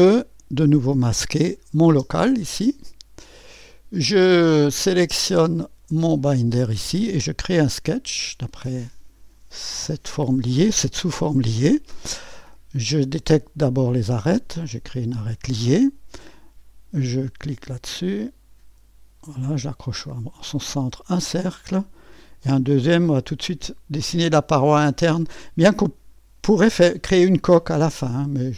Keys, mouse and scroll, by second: 0.0 scroll up 1, 1.1 click, 1.4 click, 1.9 space, 2.7 click, 3.7 click, 5.9 click, 7.5 click, 13.3 click, 14.9 click, 17.1 click, 19.4 click, 20.7 click, 22.8 click, 25.2 click.